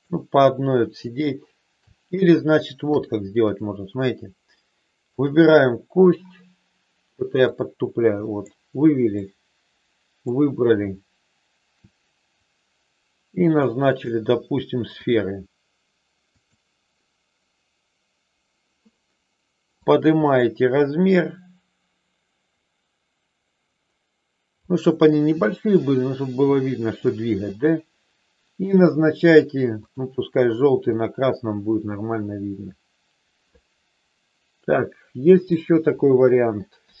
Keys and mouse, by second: 2.8 KP_3, 3.3 click, 5.1 click, 7.4-8.4 drag, 9.1-10.3 drag, 13.8-15.2 drag, 16.3 click, 19.8-25.2 drag, 26.6 shift+middle click, 27.6 middle click, 29.8 click, 30.9-35.4 middle drag, 36.8 KP_7.